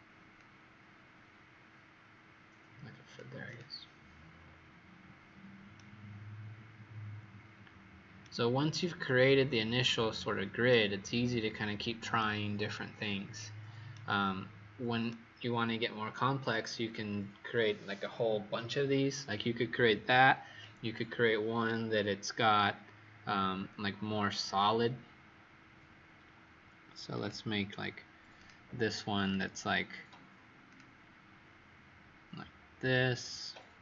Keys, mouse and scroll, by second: 0.3 click, 4.1-5.0 scroll up 5, 5.0-5.7 scroll up 3, 5.7 right click, 9.2-10.1 scroll down 2, 10.1-10.6 scroll down 2, 10.6 right click, 13.8 right click, 22.5-23.1 scroll down 6, 23.4-24.1 scroll up 2, 27.1 click.